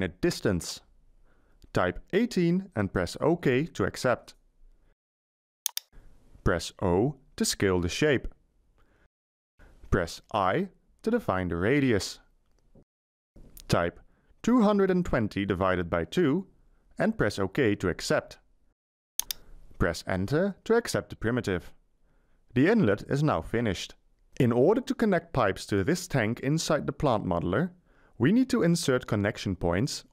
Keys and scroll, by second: 2.0 1, 2.2 8, 9.9 i, 12.6 Delete, 14.4-16.5 typing, 20.8 Return.